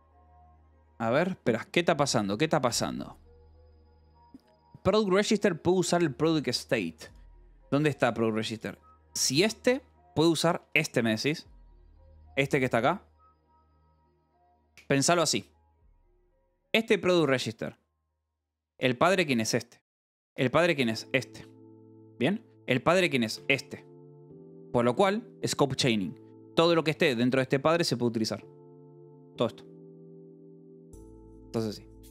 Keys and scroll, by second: 7.7 Escape, 9.6 k, 10.3 Escape, 11.1 shift+v, 14.3 Escape, 15.7 j, 16.6 k, 17.7 shift+v, 18.3 Escape, 18.9 k, 19.7 shift+v, 20.1 Escape, 20.3 k, 21.2 shift+v, 22.4 Escape, 22.6 k, 23.8 shift+v, 26.1 Escape, 26.5 j, 27.0 j, 28.9 Escape.